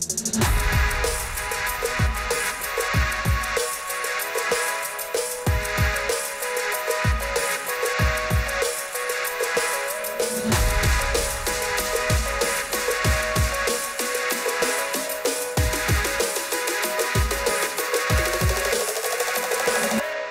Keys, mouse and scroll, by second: 0.9 click, 2.5 click, 8.2 click, 11.6 click, 12.5 click, 14.9 click.